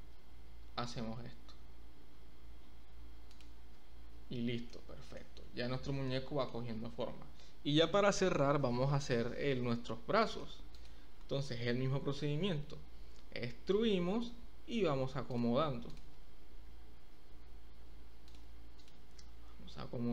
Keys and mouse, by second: 0.2 s, 3.3 click, 3.5 Tab, 4.7-5.1 shift+middle drag, 6.1 shift+click, 6.2 shift+middle drag, 8.7 Tab, 10.1 shift+middle click, 10.3 shift+click, 12.3 e, 14.1 click, 15.3 click, 15.8 click, 16.6 g, 19.1 g.